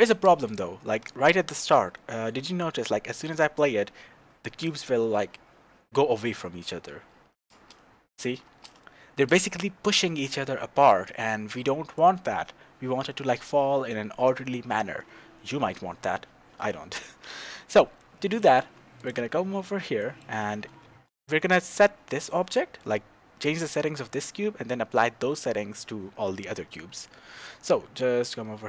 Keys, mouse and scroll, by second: 0.4 shift+space, 0.9 click, 1.9-6.5 middle drag, 7.5 shift+space, 8.5 shift+space, 9.2-10.9 middle drag, 10.9 click, 11.9 click, 16.7-19.0 shift+middle drag, 19.0 click, 19.2 middle click, 19.5-19.9 scroll up 1, 20.0-28.6 shift+middle drag.